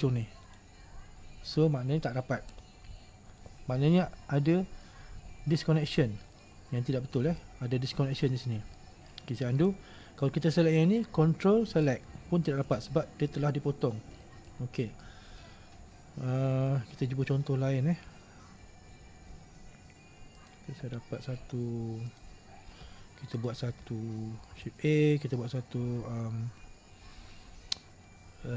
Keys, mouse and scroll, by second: 0.6 ctrl+right click, 6.5-8.2 middle drag, 8.2-8.5 scroll down 1, 8.5-8.9 scroll up 1, 8.9-9.7 middle drag, 9.7 ctrl+z, 11.7 ctrl+right click, 12.8 ctrl+z, 14.3 middle click, 14.7-15.1 scroll down 1, 15.1 middle click, 15.8-16.4 scroll up 2, 16.4-16.8 scroll down 1, 16.8-19.8 shift+middle drag, 20.5 click, 22.2 click, 23.5 click.